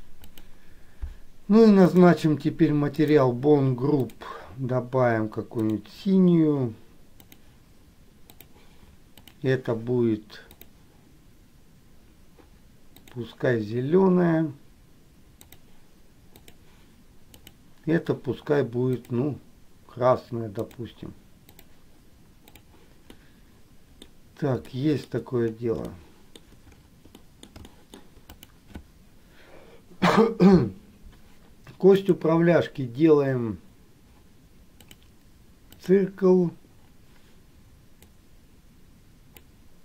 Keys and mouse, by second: 0.5 click, 3.1 click, 4.2 click, 5.9-7.6 drag, 8.5 click, 13.1-15.8 drag, 17.6 click, 19.1 click, 20.7-21.8 drag, 23.2 middle click, 24.8 shift+middle click, 26.0 shift+middle click, 27.2 middle click, 27.8 shift+middle click, 28.4 click, 32.1-35.2 drag, 35.9 click, 38.2-39.6 drag.